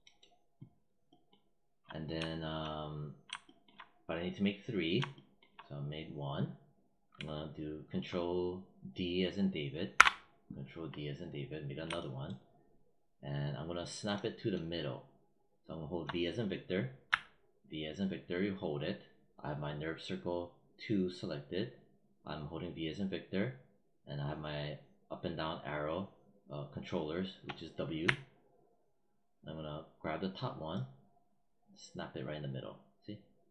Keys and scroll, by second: 9.8 ctrl+d, 16.9 v.